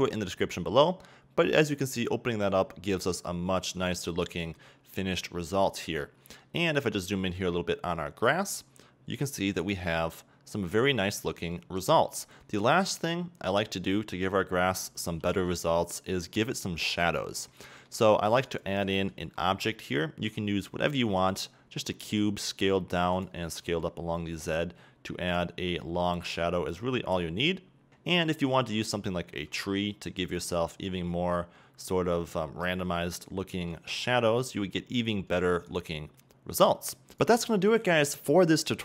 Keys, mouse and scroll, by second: 0.0 click, 1.8 scroll up 1, 4.2-5.7 shift+middle drag, 5.7-6.3 scroll up 2, 6.3-8.4 middle drag, 8.4 scroll up 2, 10.2 right drag, 11.0-11.6 scroll down 2, 11.6 a, 12.6-13.9 middle drag, 13.9 right click, 15.5 h, 16.1 middle click, 16.1-16.5 scroll down 2, 16.5-18.6 middle drag, 18.6 click, 19.2 shift+a, 22.3 s, 23.4 click, 23.7 s, 25.6 click, 25.8-26.8 middle drag, 26.8 g, 27.9 shift+d, 27.9 drag, 28.1-28.9 middle drag, 29.7 g, 30.8 click, 31.1-31.8 scroll up 3, 31.8-36.1 middle drag, 36.1 right drag.